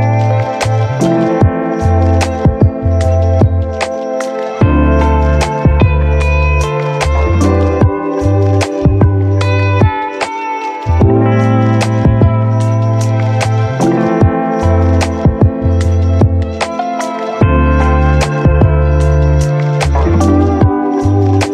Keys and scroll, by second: 7.5 ctrl+Delete.